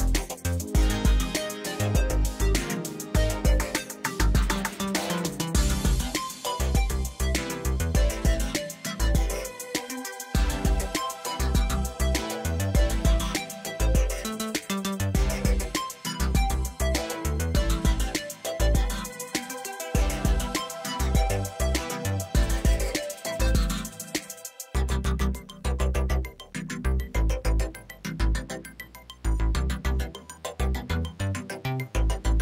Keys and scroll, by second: 0.1 Tab, 0.9 shift+z, 2.0 g, 2.2 x, 3.1 Tab, 9.6 g, 9.8 z, 11.4 alt+a, 17.3 shift+a, 18.6 Tab, 19.0 s, 20.3 s, 23.3 s, 24.1 g, 24.2 z, 25.3 g, 25.5 x, 26.5 Tab, 30.0 ctrl+r.